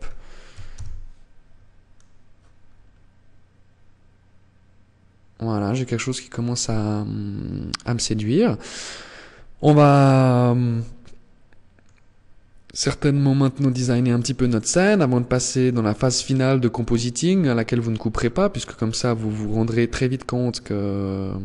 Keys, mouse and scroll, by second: 1.5-2.2 scroll up 4, 5.2 scroll up 5, 9.6 middle click, 11.3 scroll up 2, 13.7 middle click, 15.4 shift+middle click.